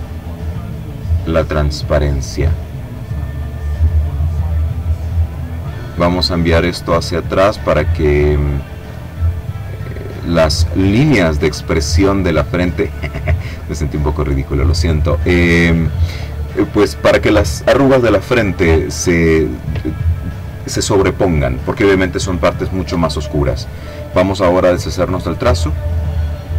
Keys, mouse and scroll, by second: 4.5 click, 5.7 click, 6.7 click, 8.5-10.8 drag, 11.6 click, 12.6 click, 24.4 click, 25.1 click.